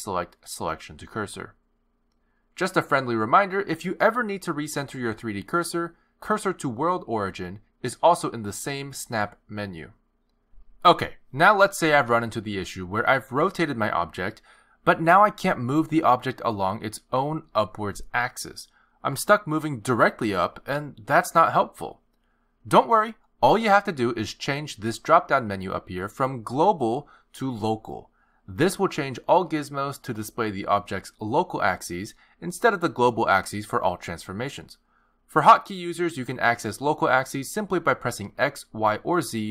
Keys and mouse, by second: 6.7 shift+s, 11.0 r, 15.1 click, 16.7 click, 18.6 click, 26.0 click, 30.7 click, 33.9 click, 35.7 click, 37.7 click.